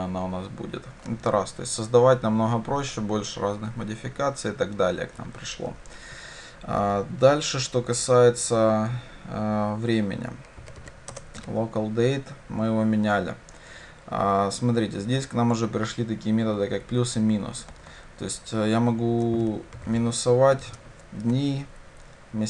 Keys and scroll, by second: 11.2 Return.